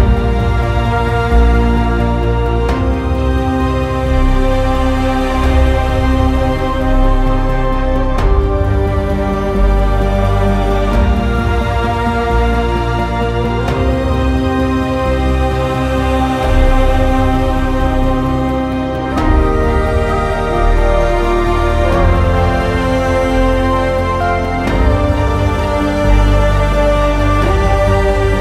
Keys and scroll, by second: 14.4-15.1 typing, 17.7 w, 22.4 s, 25.1 s.